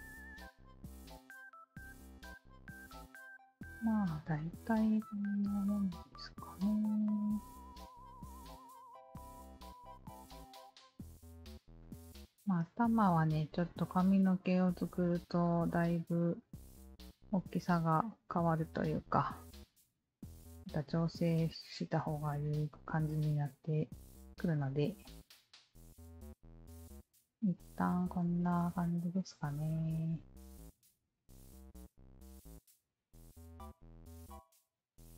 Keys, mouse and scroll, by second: 0.9-1.9 alt+middle drag, 9.5 alt+right click, 10.4 alt+middle click, 15.7 click, 16.8 Tab, 17.7 click, 19.6-20.6 drag, 21.0 click, 24.2 Tab, 25.0 click, 28.7-32.5 alt+drag, 33.1 alt+click, 33.6 alt+click, 34.0 Tab, 34.4 alt+click.